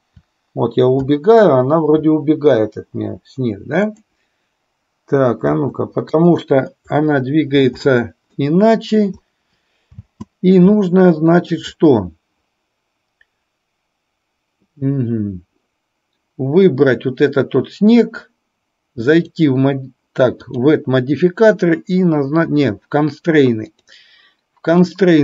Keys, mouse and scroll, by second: 5.5 Left, 6.3 click, 7.1-7.6 middle drag, 8.4-9.1 middle drag, 10.1 space, 10.9-11.6 shift+middle drag, 19.3 drag, 20.6-22.6 drag, 25.0-25.2 drag.